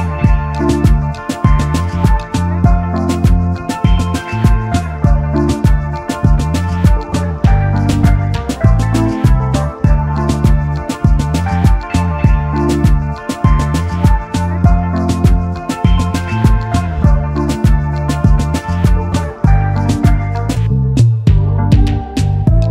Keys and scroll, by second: 0.0-0.4 typing, 1.6 shift+s.